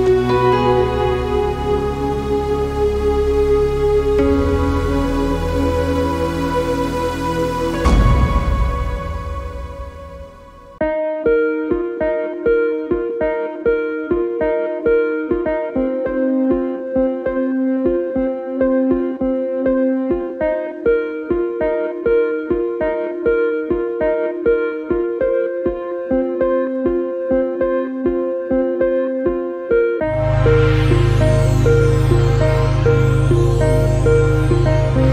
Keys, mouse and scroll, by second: 0.3 scroll down 2, 0.5 ctrl+r, 1.7 middle click, 4.4 middle click, 4.6 scroll up 2, 4.8 a, 4.9 a, 8.2 k, 9.1 middle click, 9.7 k, 10.4 k, 10.9 middle click, 11.4 k, 12.3 a, 12.4 middle click, 12.8 ctrl+s, 13.1 scroll down 2, 13.2 middle click, 14.5-15.6 shift+middle drag, 18.3 middle click, 18.7 k, 20.0 shift+middle click, 20.9 k, 23.9 middle click, 24.1 a, 24.4 shift+middle click, 24.8 k, 25.8 middle click, 26.3 k, 27.1 middle click, 27.4 k, 28.5 middle click, 29.1 ctrl+s, 29.2 shift+middle click, 29.8 a, 30.2 k, 31.0 middle click, 31.4 k, 32.4 middle click, 32.7 a, 32.8 middle click, 34.9 ctrl+s.